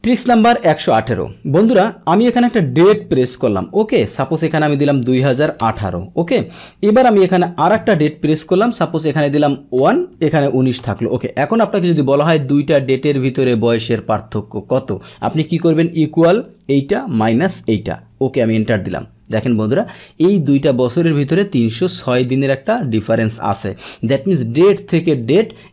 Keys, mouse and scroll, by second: 0.0 alt+Tab, 1.7 click, 4.2 click, 4.9 Delete, 6.2 Right, 6.2 Return, 6.6 Up, 9.8 BackSpace, 10.8 Return, 12.9 click, 17.5 click, 18.1 Return, 19.3 click, 20.7 click, 21.9 click, 24.3 click, 25.2-25.7 drag.